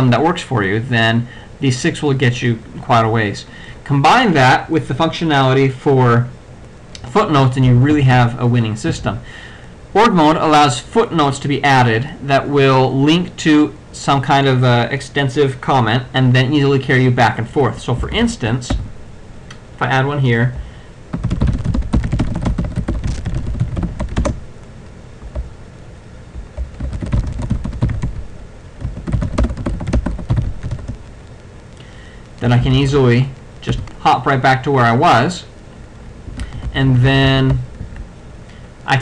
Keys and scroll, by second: 7.8 alt+f, 9.0 alt+f, 18.1 ctrl+x, 18.8 f, 21.0-24.7 typing, 26.7-30.7 typing, 32.7 ctrl+c, 32.9 ctrl+x, 33.8 f, 36.4 ctrl+f, 37.9 shift+;.